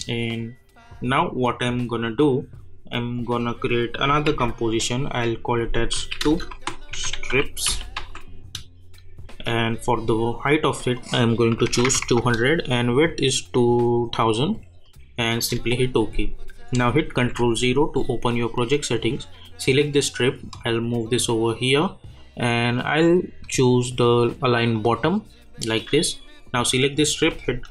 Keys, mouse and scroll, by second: 4.0 click, 4.3 ctrl+n, 5.9-8.4 typing, 10.9 click, 14.4 click, 17.2 ctrl+0, 19.3-23.3 drag, 24.7 click.